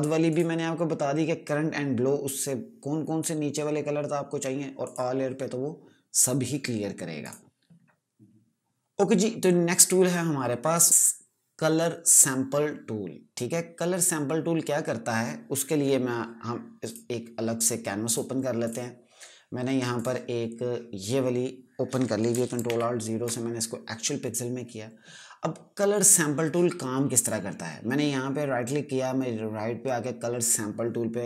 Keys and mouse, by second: 0.8 click, 5.4 click, 10.9 right click, 16.7 click, 22.6 alt+0, 27.0 right click.